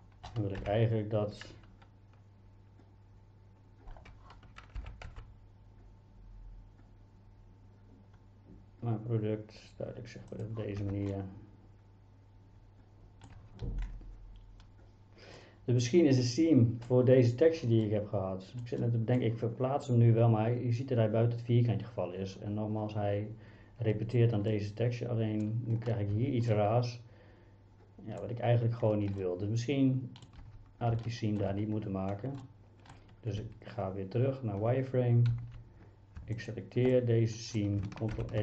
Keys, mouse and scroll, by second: 0.6 KP_1, 4.8 g, 5.1 x, 10.3 click, 10.8 Tab, 11.1-13.3 middle drag, 13.4 Tab, 15.4-16.9 middle drag, 17.9 middle click, 18.8 middle click, 24.5 middle click, 26.2 Tab, 26.5-28.2 middle drag, 29.2-30.3 middle drag, 30.4 Tab, 31.1 middle click, 32.4 middle click, 33.4 z, 35.4 a, 35.5 a, 36.5 alt+click, 36.9 middle click, 38.2 ctrl+e.